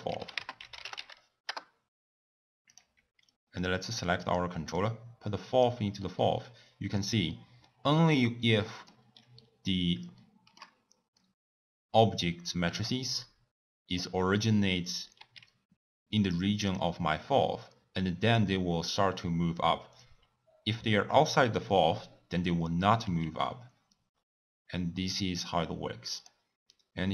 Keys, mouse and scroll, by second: 3.5 drag, 4.0-4.8 drag, 8.6 middle click, 9.0 scroll down 1, 9.1-10.2 scroll up 3, 10.2-14.2 shift+middle drag, 15.1 s, 23.0 s.